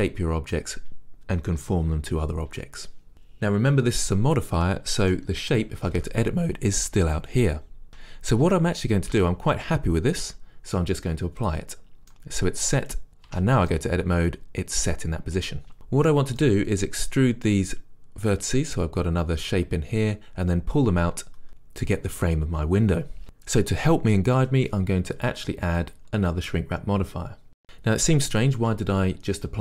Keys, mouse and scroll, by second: 5.9 Tab, 11.5 click, 12.3-27.4 middle drag, 13.4 Tab, 27.4-29.6 drag.